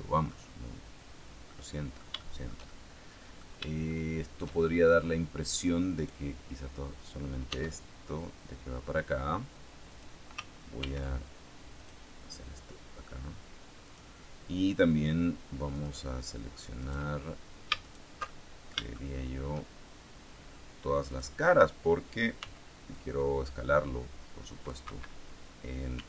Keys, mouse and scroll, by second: 1.4 middle click, 2.1-3.5 shift+middle drag, 3.8 shift+middle click, 4.5-5.5 shift+scroll up 3, 7.4 e, 9.8 click, 10.7 ctrl+r, 11.7 click, 13.8 click, 15.7 click, 16.7 right click, 17.7 alt+shift+right click, 18.1 alt+shift+middle click, 19.0 shift+middle click, 21.0 click, 22.3 c, 22.8-24.8 drag, 24.7 Escape, 25.9 s.